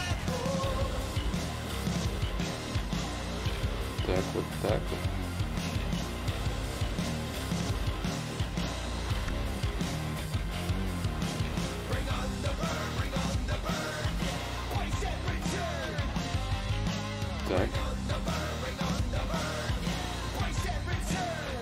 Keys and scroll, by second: 3.0 ctrl+z, 3.0 ctrl+y.